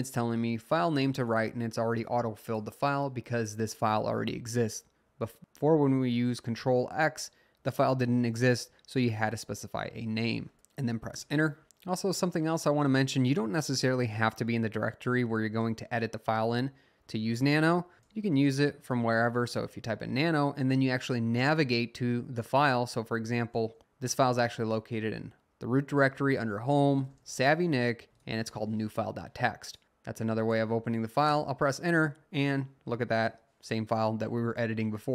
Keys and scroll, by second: 11.1 Return, 17.7-20.1 typing, 24.0-25.2 typing, 26.2-28.1 typing, 28.2 Tab, 31.3 Return.